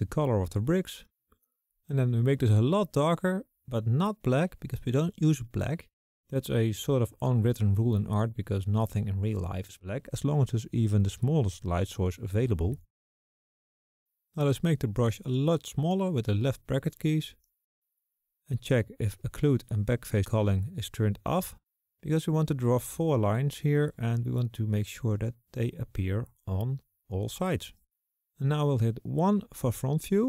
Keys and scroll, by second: 15.7 typing, 17.1-17.8 typing, 29.1 typing.